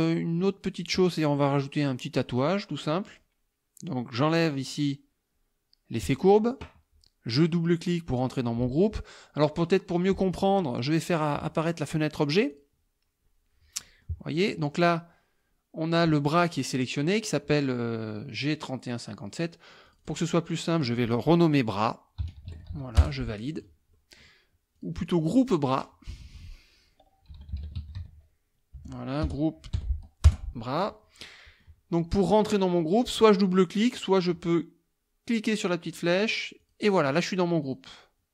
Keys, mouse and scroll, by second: 6.1 click, 11.7 click, 12.5 click, 13.8 middle click, 14.8 click, 19.9 click, 22.0-23.2 typing, 23.9 middle click, 24.8 click, 25.1 click, 25.7 click, 27.1-29.3 typing, 30.3 Return, 31.3 click, 35.9 click, 36.6 click, 37.7 click.